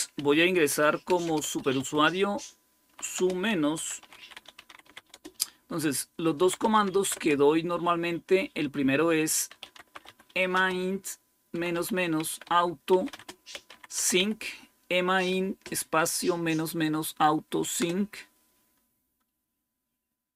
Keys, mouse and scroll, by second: 0.0-1.6 typing, 2.7-7.8 typing, 9.2-14.5 typing, 17.7 Return.